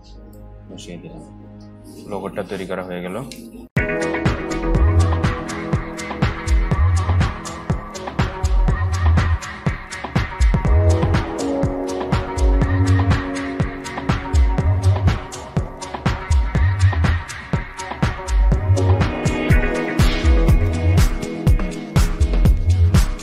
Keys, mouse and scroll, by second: 1.6 alt+scroll up 1, 2.3 scroll up 1.